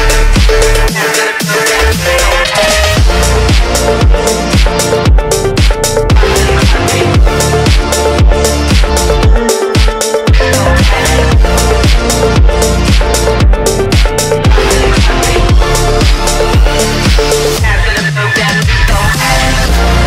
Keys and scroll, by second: 3.3 ctrl+z, 5.6 F3, 5.7 Escape, 6.2 F4, 6.4 Escape, 18.7 ctrl+Page_Down, 19.2 ctrl+Page_Up, 19.5 Escape, 20.0 F3.